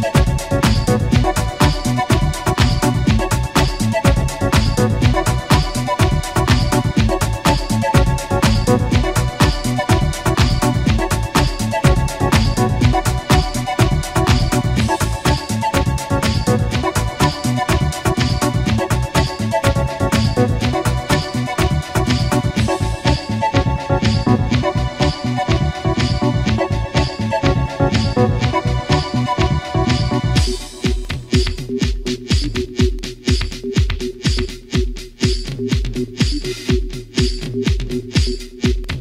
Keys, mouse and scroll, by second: 1.0 shift+click, 2.1 shift+click, 2.8 shift+click, 4.8-6.7 typing, 7.6 Return, 9.7 click, 10.9 click, 13.2-15.4 typing, 16.3 Return, 18.9-20.2 shift+middle drag, 20.9-22.1 shift+drag, 22.7-24.0 shift+drag, 24.7-25.5 shift+middle drag, 25.5-25.9 shift+scroll down 1, 26.3-26.9 shift+middle drag, 28.4 shift+click, 29.3 shift+click, 29.7 shift+g, 30.8 shift+click, 31.7-32.5 shift+middle drag, 33.1 shift+a, 35.9 click, 37.1 click, 37.8 shift+click, 38.2 g.